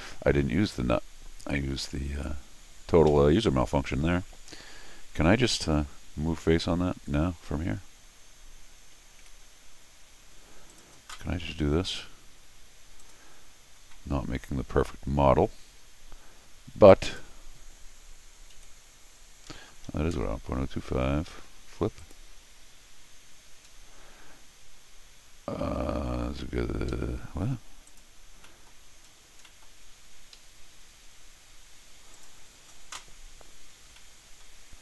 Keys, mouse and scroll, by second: 0.6 middle click, 1.8 middle click, 2.4 scroll up 2, 3.1 Escape, 5.4 middle click, 9.2 Tab, 10.7 click, 13.0 click, 16.9 click, 22.0 click, 23.7-24.9 scroll down 4, 26.9 Escape, 27.9 click, 28.4 middle click, 28.4 scroll down 2, 29.0-29.4 scroll up 4, 29.4 middle click, 29.9 scroll up 2, 30.3 Escape, 32.1 click, 33.8 scroll down 2, 34.0 middle click.